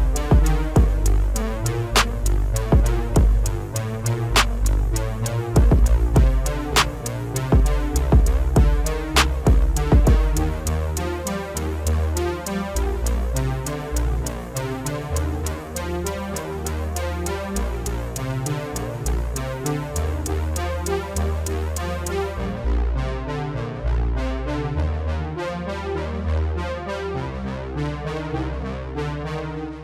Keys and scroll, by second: 3.2 F4, 7.1 alt+w, 15.3 alt+w, 17.1 F4.